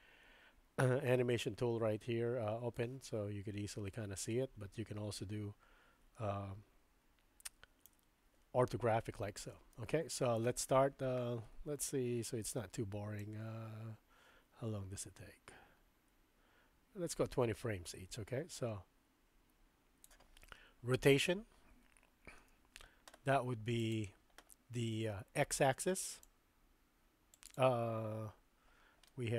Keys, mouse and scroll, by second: 7.9 KP_3, 9.8-10.4 shift+middle drag, 13.2-20.1 drag, 22.4 n, 23.8 click, 26.4-27.5 drag, 29.1-29.3 middle drag.